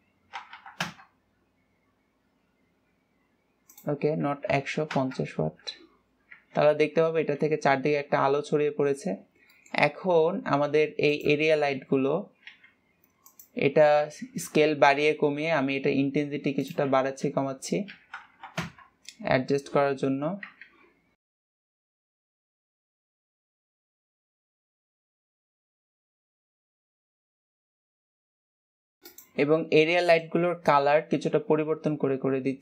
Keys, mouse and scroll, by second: 1.0 KP_0, 4.3-7.2 drag, 7.2 ctrl+s, 9.3 scroll down 1, 9.9 scroll up 1, 10.1 middle click, 10.4-10.7 scroll down 3, 11.6 click, 14.5 KP_0, 15.5 ctrl+s, 17.2-18.9 drag, 18.9 KP_0, 21.2 ctrl+s, 21.5 click, 21.6 scroll down 1, 21.9 click, 22.3 KP_0, 22.8 ctrl+s, 23.2 click, 23.4-24.4 drag, 24.6 KP_0, 25.2 scroll up 1, 25.4 ctrl+s, 25.8 click, 30.8 click.